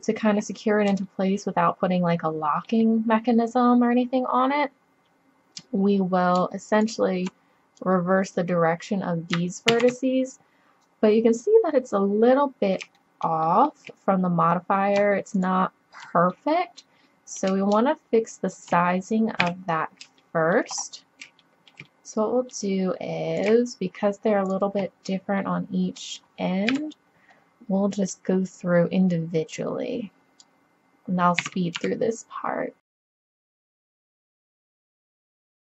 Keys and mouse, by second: 3.2-5.3 middle drag, 6.7-8.0 right drag, 7.8 click, 8.5 right click, 8.7 click, 9.7 ctrl+z, 13.2-14.9 drag, 15.4-17.3 drag, 19.4 KP_7, 23.4-25.3 middle drag, 26.7 KP_7, 31.4 s, 33.5 KP_7, 33.5 g, 34.2 click, 34.7 KP_7, 34.9 middle click, 35.0 middle click, 35.1 z, 35.2 z, 35.3 s.